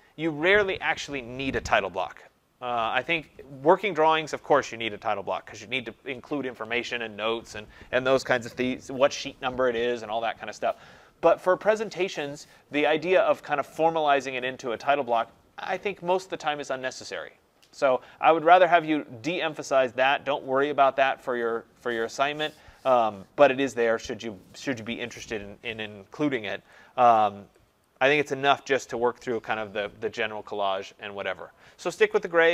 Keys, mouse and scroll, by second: 0.2-3.9 scroll, 27.2-27.8 click, 27.3 click, 27.9 click, 28.0 click, 28.1 click, 28.2 click, 28.7 click, 30.6 click.